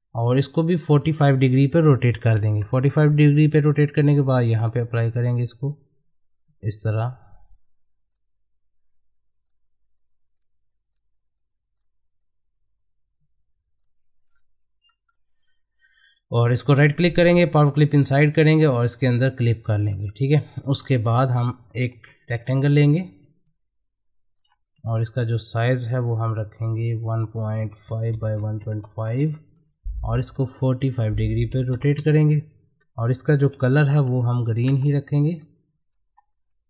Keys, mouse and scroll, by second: 0.8 click, 4.0 click, 5.0 scroll up 1, 5.3-14.3 drag, 14.3-14.9 scroll down 1, 14.9 middle click, 16.1 right click, 17.6 click, 19.5-19.9 scroll down 1, 19.9 middle click, 20.9-28.3 drag, 28.3 Tab, 30.9 click, 33.5 g.